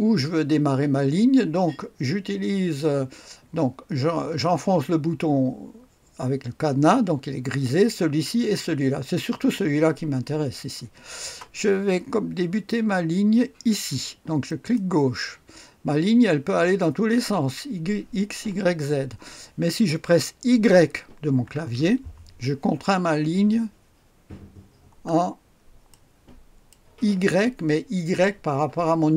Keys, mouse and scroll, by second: 14.5 click, 21.4 y, 25.2-25.9 scroll down 1, 25.9-27.4 right drag.